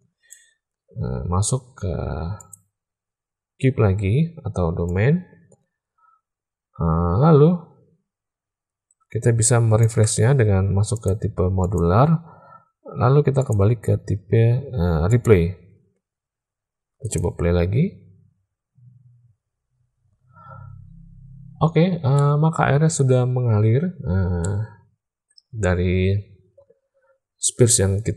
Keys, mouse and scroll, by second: 2.3 click, 4.8-9.9 drag, 10.9-11.9 drag, 13.4-15.3 drag, 16.9 click, 20.5-20.9 middle drag, 21.6-22.1 shift+middle drag.